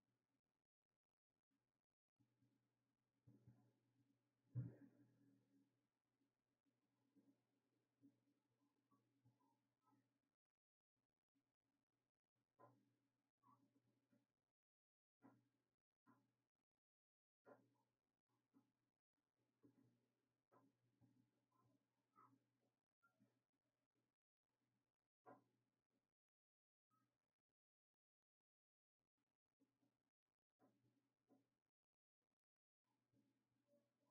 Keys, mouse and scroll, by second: 17.7-21.7 drag, 21.7-24.8 shift+right drag, 24.8-34.1 drag.